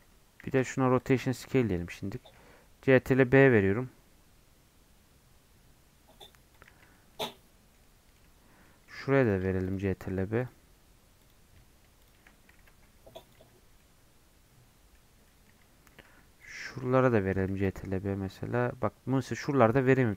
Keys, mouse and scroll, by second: 0.4 ctrl+a, 1.2 Tab, 1.7-2.1 scroll up 1, 2.1 ctrl+b, 6.8 Tab, 6.9 scroll down 2, 7.1-8.2 middle drag, 8.2 Tab, 8.6 middle click, 9.2-12.5 alt+drag, 12.5 ctrl+b, 13.3 Tab, 13.5 scroll down 1, 13.8-14.9 middle drag, 14.9 scroll up 3, 15.2 middle click, 15.5 Tab, 15.9 2, 16.4-17.5 alt+drag, 17.5 ctrl+b.